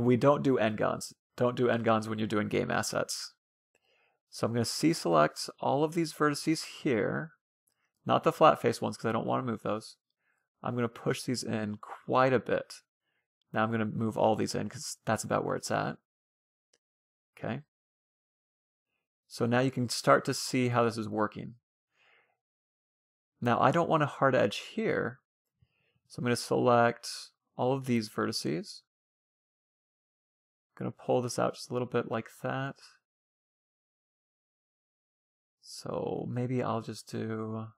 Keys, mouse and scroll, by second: 2.0 a, 2.3 c, 8.8 middle click, 9.7-11.3 drag, 11.8 a, 12.0 a, 12.7-14.3 drag, 16.5-19.3 middle drag, 17.1 Tab, 21.3-22.9 middle drag, 23.3 Tab, 24.4 middle click, 24.7 a, 25.1 c, 25.3-26.0 scroll up 1, 29.1-30.5 middle drag, 30.1-31.8 drag, 30.6 middle click, 31.6 ctrl+z, 32.6-34.2 middle drag, 34.1 ctrl+z, 36.4-37.7 middle drag.